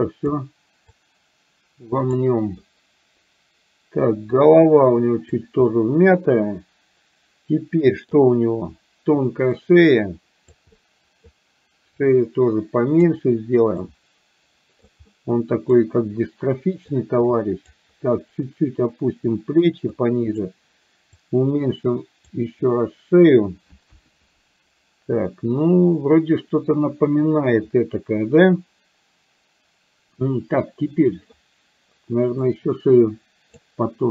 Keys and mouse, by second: 1.1-2.3 drag, 4.3-5.4 drag, 5.7-8.2 middle drag, 9.6-10.6 drag, 10.7 middle click, 11.9-13.1 drag, 13.8-14.9 drag, 15.1 middle click, 17.1 click, 18.9 click, 19.9 click, 21.2-22.3 drag, 23.9 KP_1, 32.6-33.6 drag.